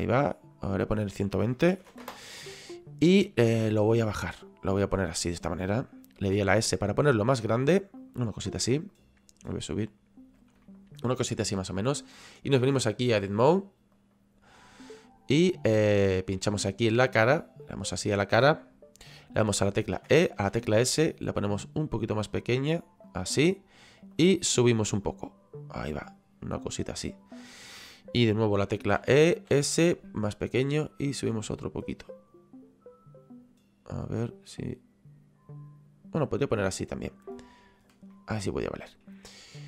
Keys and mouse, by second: 0.7 click, 1.8 KP_1, 1.9 KP_2, 2.0 Return, 2.0 KP_Enter, 3.9 click, 8.0 click, 10.7 middle click, 12.4 click, 13.9 click, 17.0 click, 17.6 right click, 23.0 click, 24.1 click, 30.3 click, 38.1 middle click.